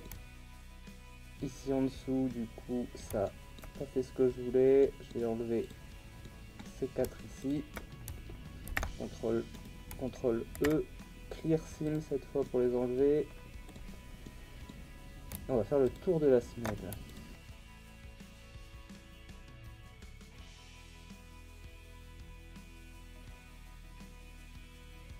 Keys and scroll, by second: 0.2 ctrl+e, 8.7 shift+e, 10.5 ctrl+e, 17.9 ctrl+e, 18.4 ctrl+e, 19.3 ctrl+e, 20.5 ctrl+e, 21.3 ctrl+e, 21.4 ctrl+e, 21.6 ctrl+e, 22.5 ctrl+e, 23.4 ctrl+e, 24.5 ctrl+e, 24.7 ctrl+e.